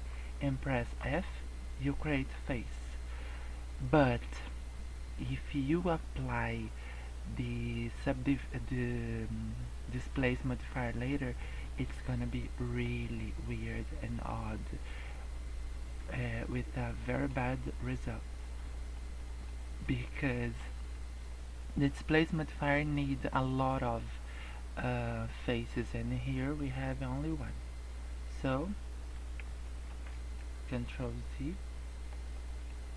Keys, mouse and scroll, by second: 0.1-0.8 scroll up 3, 0.8 f, 1.2 middle click, 3.1 middle click, 11.8 scroll down 3, 12.3 middle click, 12.8-13.2 scroll up 2, 13.3 middle click, 14.6 middle click, 15.9 scroll up 1, 16.2 middle click, 18.0-18.3 scroll up 2, 18.3 scroll down 2, 18.5 middle click, 19.1 middle click, 19.4 scroll up 1, 19.8 middle click, 29.8 ctrl+z, 30.3 middle click, 31.0 middle click, 32.3 middle click.